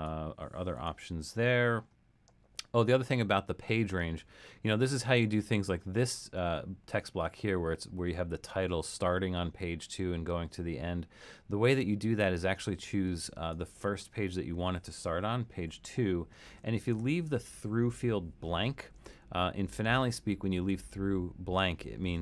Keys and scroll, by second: 15.7 2, 18.0 BackSpace.